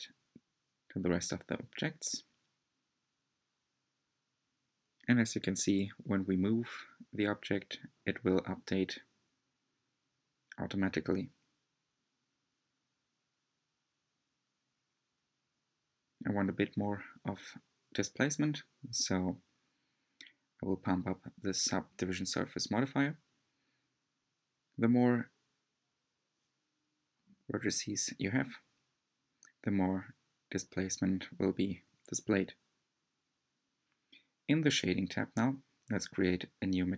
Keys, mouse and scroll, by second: 2.6 l, 4.0 scroll up 2, 5.0 click, 6.0 g, 10.5-11.1 scroll down 2, 11.8-13.4 middle drag, 13.4 click, 14.3 scroll down 2, 14.6 scroll up 2, 14.8 Tab, 15.3 click, 17.1 click, 17.6-18.0 scroll up 2, 18.0-18.5 scroll down 2, 18.8-21.3 shift+drag, 21.7 l, 22.3-23.8 middle drag, 23.8 click, 26.0-27.6 middle drag, 27.6-29.5 drag, 30.0 shift+middle click, 30.6-32.6 drag, 32.6 scroll up 1, 33.1-36.9 middle drag.